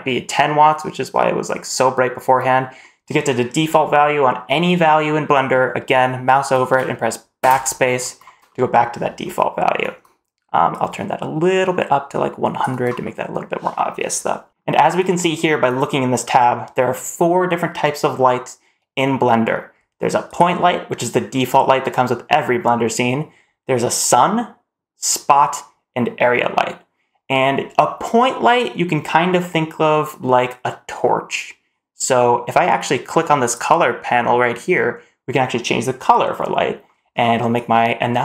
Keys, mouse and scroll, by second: 7.2 BackSpace, 8.3-9.1 middle drag, 10.6-12.6 drag, 12.9 middle click, 14.1 middle click, 20.1 click, 33.3 click.